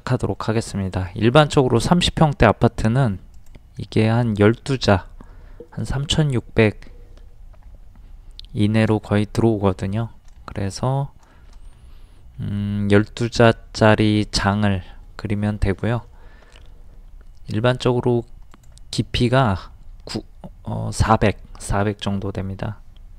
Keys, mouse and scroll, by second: 0.9-1.2 scroll up 1, 2.7 t, 3.4 click, 9.7 middle click, 10.6 shift+middle click, 11.6 shift+middle click, 17.7 r, 18.5 click.